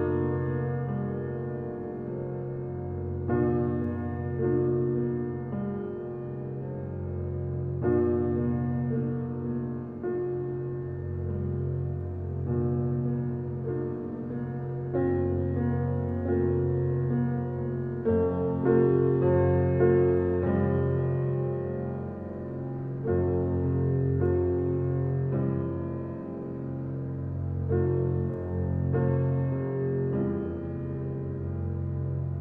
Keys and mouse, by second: 0.1 click, 1.2 click, 2.0 click, 2.7 click, 3.6-5.4 drag, 7.7 click, 8.4 click, 9.2 click, 10.0 click, 11.3 click, 11.9 click, 12.8 click, 14.0-15.0 drag, 15.5 click, 16.7 click, 17.7 click, 18.6 click, 19.4 click, 20.2 click, 20.9 click, 21.6 click, 22.9 click, 23.6 click, 24.3 click, 25.1 click, 26.5 click, 27.6 click, 28.3 click, 29.4 click, 30.5 click, 31.5 click.